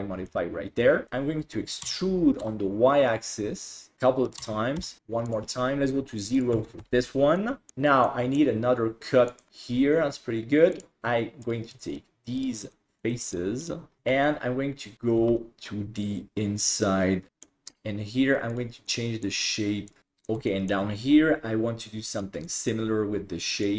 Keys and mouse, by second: 0.3 middle click, 1.9 e, 4.5 e, 6.4 click, 7.4 middle click, 8.2 middle click, 9.4 click, 10.8 click, 11.9 shift+right click, 12.4 shift+right click, 12.7 middle click, 13.3 shift+right click, 13.6 shift+right click, 14.0 alt+z, 15.2 g, 17.3 alt+z, 17.3 middle click, 18.9 middle click, 19.9 click, 20.0 middle click, 20.6 shift+middle click, 22.2 right click, 22.5 middle click, 23.7 click.